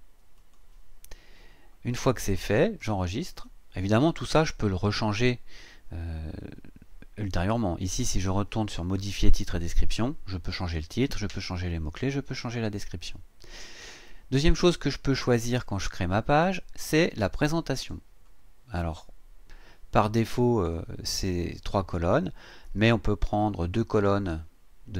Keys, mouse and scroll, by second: 0.4 click, 2.3-2.6 scroll down 2, 3.3 click, 17.8 click, 23.9 click.